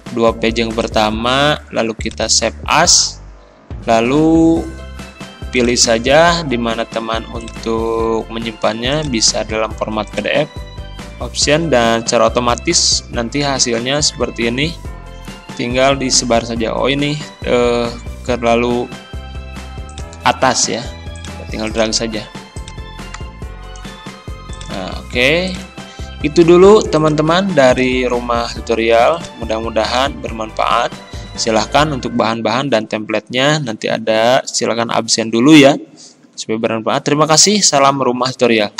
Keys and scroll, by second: 30.0 Delete.